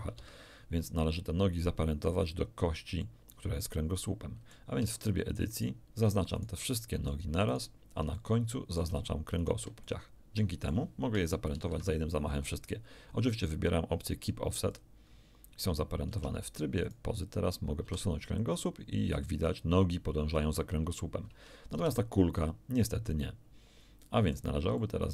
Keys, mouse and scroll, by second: 0.2 Escape, 3.0-4.7 middle drag, 4.8 Tab, 5.6 right click, 6.4 shift+right click, 6.7 shift+middle click, 7.5 shift+right click, 8.2 shift+middle click, 9.4 shift+right click, 9.8-10.9 shift+middle drag, 11.5 ctrl+p, 14.7 click, 16.1 Tab, 16.8 right click, 17.8 g, 21.8 Escape, 22.4-24.5 drag, 24.8 click.